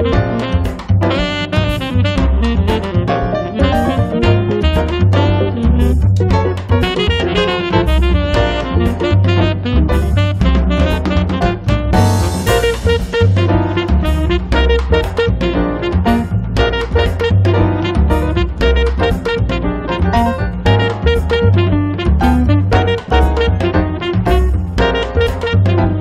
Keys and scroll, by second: 6.3-8.4 typing, 11.2-12.1 typing, 13.5 1, 13.8 0, 15.2-16.2 typing, 19.9-20.8 typing, 22.5 space, 23.1 Escape.